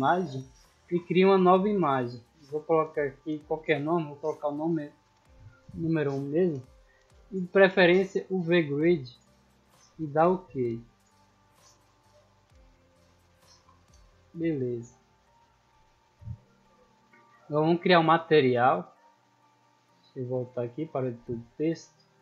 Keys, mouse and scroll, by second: 1.2 click, 2.3 click, 4.7 click, 6.6 click, 8.3 click, 9.4 click, 11.6-12.3 scroll down 4, 12.3-12.6 scroll up 2, 13.5 u, 13.7 click, 14.3 scroll up 2, 14.7 middle click, 15.6 Tab, 17.7-18.1 scroll up 2, 18.6 click, 19.9 click, 20.8 click, 21.6-22.0 scroll down 2.